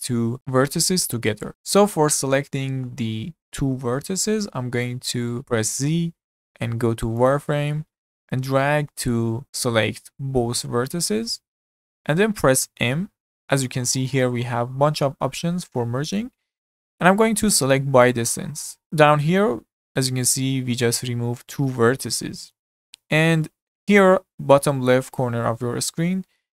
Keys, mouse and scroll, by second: 0.4 click, 1.5 middle click, 5.8 z, 8.3 click, 12.8 m.